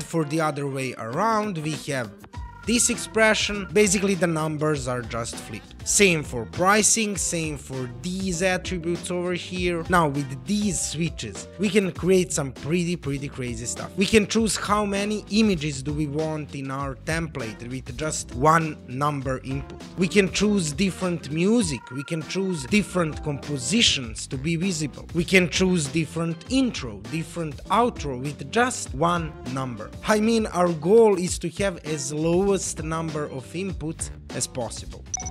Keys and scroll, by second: 0.1 e, 7.8 e.